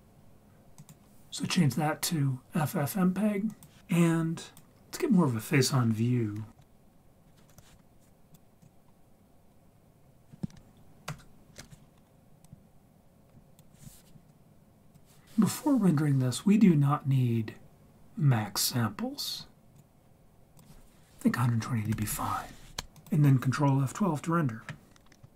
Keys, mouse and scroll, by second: 3.5 click, 6.5 3, 6.5 KP_1, 6.6 KP_3, 6.9 scroll up 2, 7.5 n, 8.3 click, 8.6 click, 9.2-9.6 scroll down 2, 9.6-10.1 scroll up 3, 10.2-10.5 scroll down 1, 11.1 ctrl+alt+KP_0, 12.4-13.6 drag, 14.3 click, 19.7 click, 20.5 click.